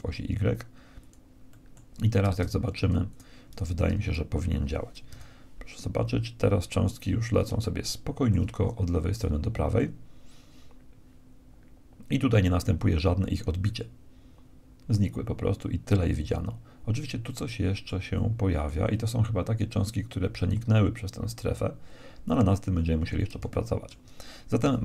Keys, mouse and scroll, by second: 3.2-4.8 drag, 4.0 shift+c, 5.2 KP_1, 6.2 middle click, 7.6-9.1 middle drag, 9.1-11.0 right drag, 17.2-20.9 middle drag, 22.9-24.8 middle drag, 24.7 KP_1.